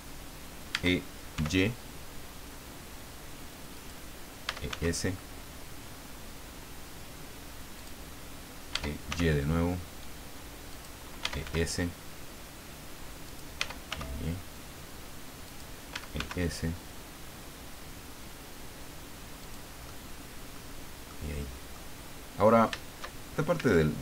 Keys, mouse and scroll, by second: 0.7 e, 1.4 y, 3.8 click, 4.4 e, 4.7 s, 7.8 click, 8.7 e, 9.1 y, 10.7 click, 11.0-11.9 typing, 13.2 click, 13.6 e, 13.9 y, 15.4 click, 15.7-16.6 typing, 19.4 click, 19.8 middle click, 21.1 middle click, 22.0 scroll up 2, 23.5 a.